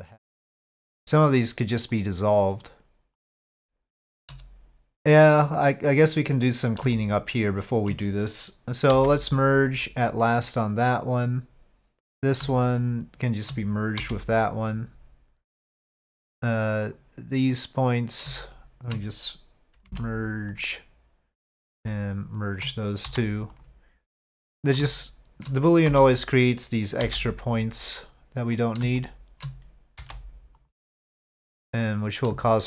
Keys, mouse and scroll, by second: 1.9 shift+click, 3.2 shift+click, 6.9 shift+click, 8.9 m, 12.8 shift+click, 14.0 m, 18.4 shift+click, 19.9 m, 21.4 click, 23.6 m, 24.9 shift+click, 27.0 m, 28.6 click, 30.0 m, 31.8 click, 32.5 shift+click.